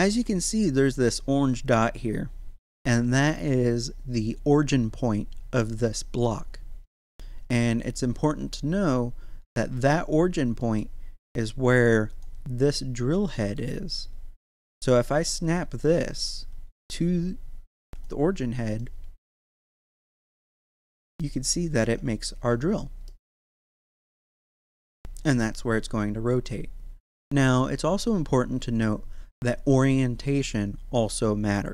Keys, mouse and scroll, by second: 0.2 middle click, 5.0-6.9 scroll down 1, 7.9-8.6 scroll down 1, 9.0 scroll up 1, 10.6 middle click, 12.1 click, 13.2 middle click, 15.4 right click, 16.6 g, 17.9 click, 18.3-18.8 scroll down 1, 18.8-21.8 middle drag, 21.8 Tab, 23.1-27.9 middle drag, 27.9-28.8 scroll down 1, 28.8-31.7 middle drag.